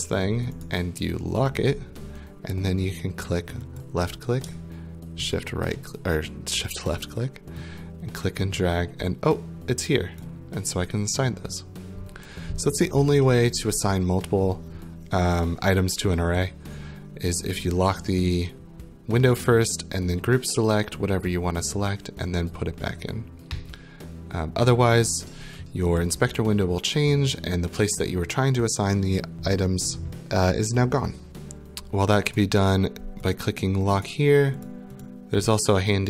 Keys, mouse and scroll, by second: 0.6 right click, 1.6 click, 3.8 click, 5.3 shift+click, 10.2 click, 31.3 click, 32.4 right click, 33.3 click, 34.1 right click, 34.7 click, 35.0 click.